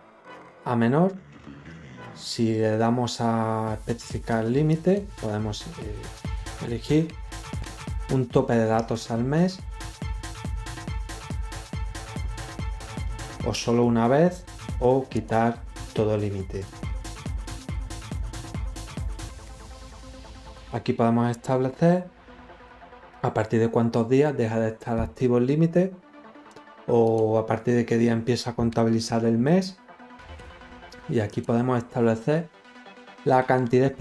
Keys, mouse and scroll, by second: 4.6 click, 15.0 click, 16.6 click, 17.5 click, 20.5 click, 26.9 click, 31.2 click, 31.2 right click.